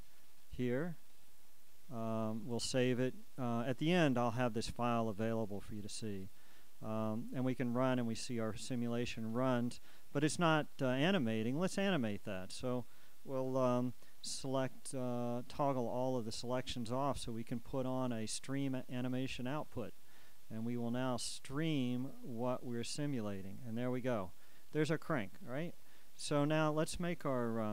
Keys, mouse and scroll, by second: 1.2 click, 5.5-8.0 drag, 17.4 a, 19.5-27.7 drag.